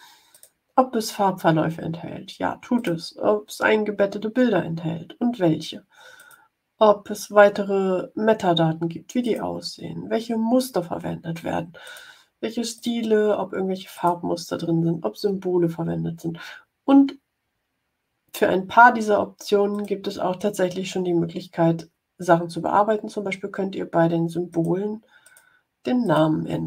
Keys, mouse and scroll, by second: 0.2 click, 2.7 click, 6.1 click, 9.1 click, 11.7 click, 12.6 click, 13.8 click, 19.7 click, 24.4 click, 25.2 click, 25.9 click.